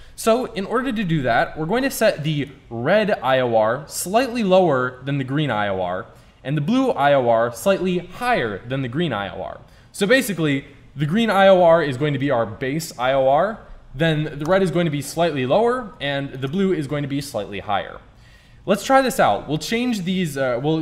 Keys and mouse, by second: 2.4-4.4 drag, 11.1-12.9 drag, 14.5-18.4 drag.